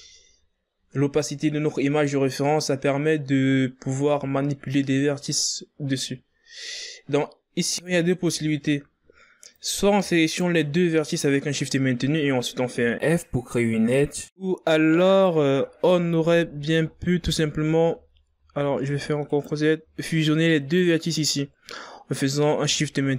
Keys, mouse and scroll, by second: 0.4 shift+right click, 1.7 scroll down 4, 2.4 scroll down 7, 2.9 scroll up 6, 3.4-4.1 scroll down 6, 4.1 scroll up 5, 6.8 scroll up 5, 8.5 right click, 9.2-9.6 ctrl+scroll up 3, 10.3 right click, 11.0 shift+right click, 13.7 f, 14.9 right click, 16.6 ctrl+z, 17.0 ctrl+z, 17.5 ctrl+z, 18.0 ctrl+z, 18.7 ctrl+z, 20.0 right click, 21.4 shift+right click.